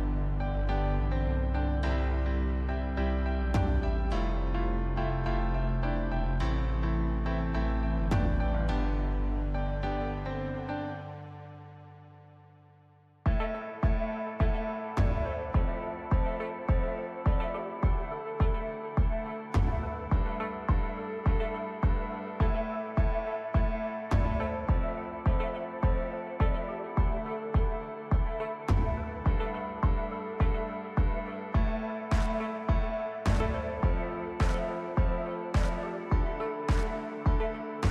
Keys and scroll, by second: 1.9 shift+z, 4.1 ctrl+KP_3, 4.9 shift+z, 6.0 s, 7.6 s, 10.6 s, 12.5 Tab, 15.8 shift+z, 17.1 ctrl+KP_3, 17.7 Tab, 18.2 Tab, 18.8 shift+d, 19.3 Tab, 20.8 s, 24.2 shift+z, 28.2 shift+z, 30.2 2, 31.0 ctrl+b, 35.7 Tab.